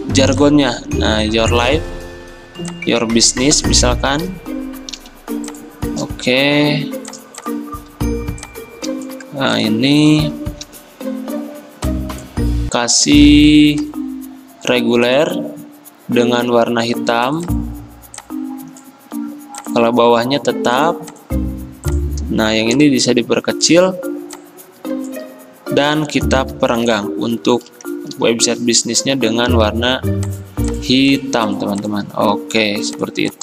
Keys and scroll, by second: 10.7 t, 26.6 alt+Right, 26.8 alt+Right, 27.0 alt+Right, 29.0 d.